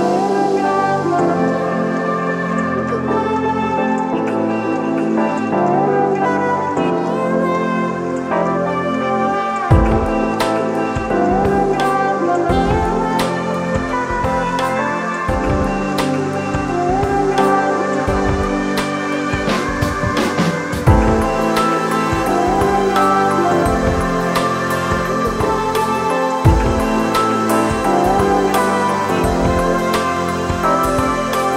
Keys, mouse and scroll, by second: 6.9 alt+shift+click, 29.0 alt+shift+click.